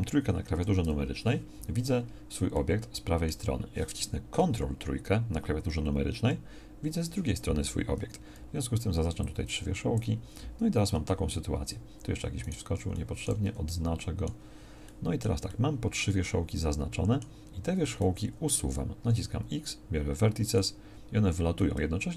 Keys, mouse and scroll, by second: 0.6 KP_3, 9.0 b, 11.2 z, 13.5 b, 17.6 z, 19.0 x.